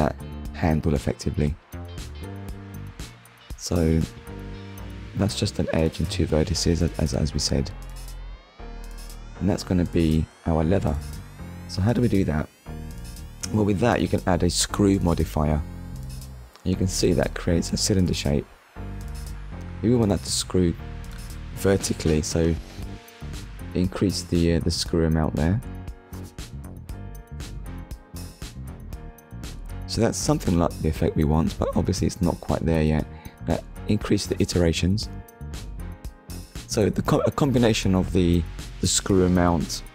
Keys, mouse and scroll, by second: 3.0 scroll down 1, 6.5 click, 7.5 middle click, 9.0 click, 12.6 click, 19.2 click, 21.1 scroll down 1, 21.7 shift+middle click, 22.2 middle click, 25.1 click, 29.8 KP_1, 31.1-31.5 scroll up 1, 34.0 click, 36.1 scroll down 1, 37.0 scroll down 1, 37.8 scroll up 1, 38.7 shift+click.